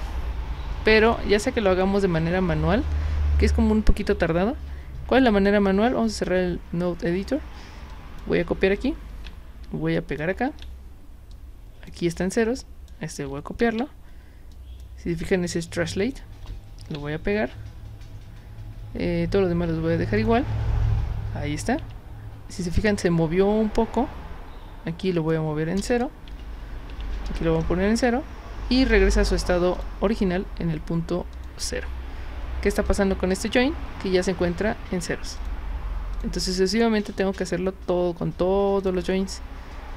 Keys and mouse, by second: 1.0 click, 6.2 click, 7.9 click, 9.1 ctrl+c, 10.0 click, 10.5 ctrl+v, 11.3 click, 12.6 click, 13.6 ctrl+c, 14.5 click, 16.8 ctrl+v, 20.2 click, 21.8 Tab, 25.0 click, 26.3 Tab, 26.9 Tab, 29.7 drag, 31.3 click, 32.9 click, 35.4 click, 36.1 click, 38.8 click.